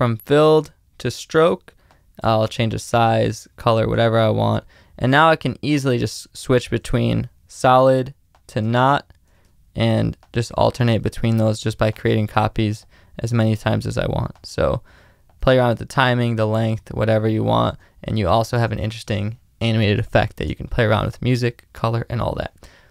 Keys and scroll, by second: 6.0 space, 8.6 space, 9.4 alt+space, 16.4 space, 17.7 space, 21.5 space.